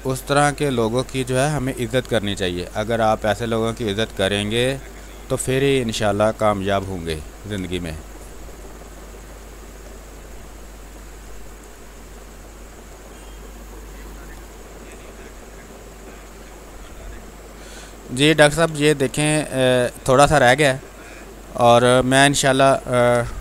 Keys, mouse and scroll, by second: 1.5-2.9 drag, 2.9 click, 4.0 space, 4.2 alt+click, 5.9 click, 6.6 ctrl+d, 7.5 space, 7.9 alt+click, 8.7 click, 9.5 s, 10.9 click, 11.0 space, 15.0 click, 16.0 alt+click, 17.1 ctrl+click.